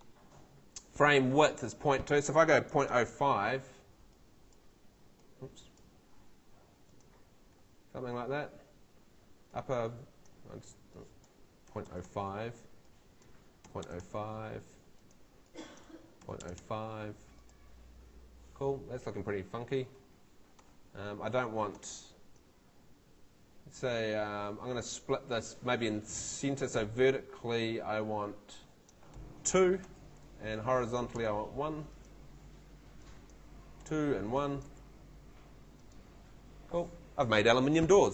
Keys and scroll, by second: 2.4-3.6 typing, 6.0 2, 11.4-14.6 typing, 15.9-17.1 typing, 29.8 2, 31.2 |, 33.8 2, 34.7 1.